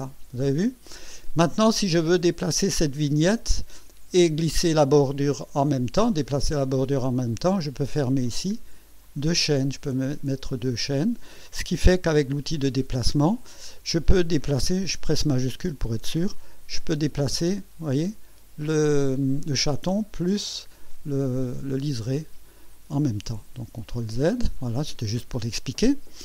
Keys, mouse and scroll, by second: 7.2 click, 9.0 click, 12.2 m, 16.3-20.5 shift+drag, 23.4 ctrl+z.